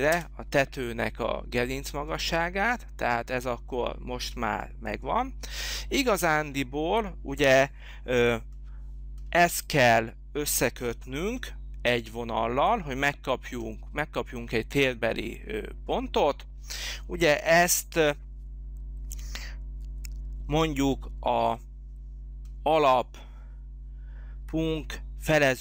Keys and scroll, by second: 0.1 Return.